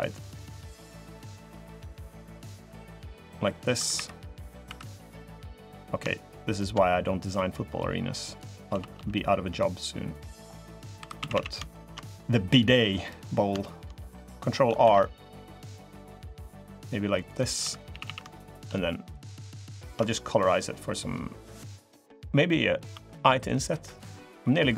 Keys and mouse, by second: 0.5 click, 1.9-3.4 drag, 3.5 3, 3.7 3, 4.4 2, 4.9 middle click, 6.3 shift+middle click, 6.6 middle click, 8.4 s, 10.5 click, 10.7 3, 10.9 a, 11.1 a, 11.5 alt+shift+click, 11.8 click, 13.4 shift+click, 14.6 ctrl+r, 17.4 3, 17.7 a, 17.8 a, 18.2 alt+click, 18.9 alt+shift+click, 20.3 click, 21.3 middle click, 24.6 alt+i.